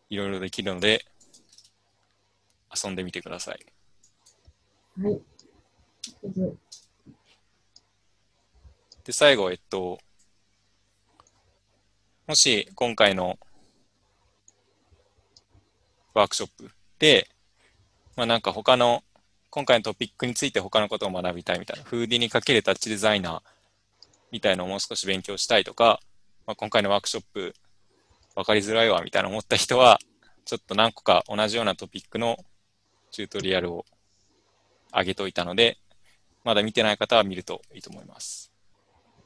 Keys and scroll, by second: 1.6 alt+Tab, 2.8 alt+Tab, 6.2 u, 6.8 alt+Tab.